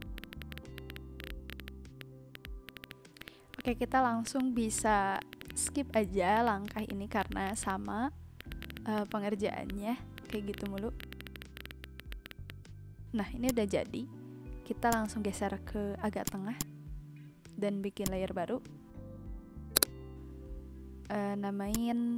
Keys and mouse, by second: 0.0 click, 0.1 click, 0.7 click, 1.1 b, 1.2 click, 1.5 click, 1.5 ctrl+z, 1.6 click, 2.0 click, 2.3 click, 2.6 click, 2.7 ctrl+z, 2.8 click, 3.5 click, 4.0 v, 4.2 click, 4.5 Left, 4.6 Right, 4.8 click, 5.0 b, 5.1 click, 5.3 click, 5.6 click, 5.9 click, 6.2 click, 6.4 ctrl+z, 6.4 click, 6.6 ctrl+z, 6.8 click, 6.8 v, 7.1 b, 7.2 click, 7.6 click, 7.8 ctrl+z, 8.3 v, 8.4 click, 8.5 click, 8.7 click, 8.9 Left, 8.9 click, 9.1 click, 9.4 Right, 9.7 click, 9.8 ctrl+z, 10.1 click, 10.5 click, 11.0 click, 11.2 click, 11.5 ctrl+z, 11.8 click, 12.0 click, 12.1 click, 12.2 click, 12.5 click, 13.0 click, 14.8 click, 16.2 click, 17.4 Delete, 17.5 click, 19.7 click, 20.3-20.8 typing, 21.6 click.